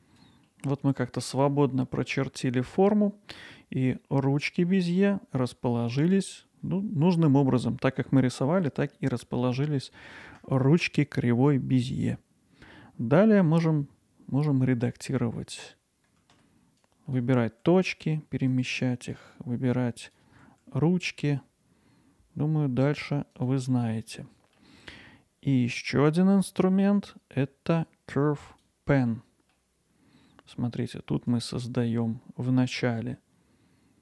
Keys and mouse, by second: 2.2-14.5 middle drag, 16.3 w, 16.9 click, 17.6 g, 18.8-20.4 drag, 20.4 g, 23.9 middle click, 25.3 middle click, 26.2 middle click, 28.6 click, 29.3 middle click.